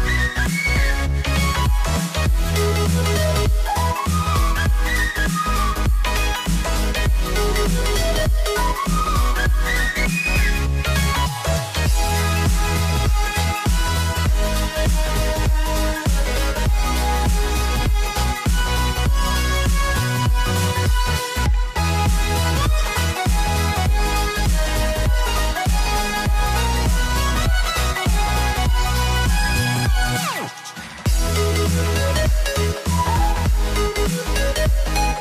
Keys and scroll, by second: 14.7 alt+BackSpace.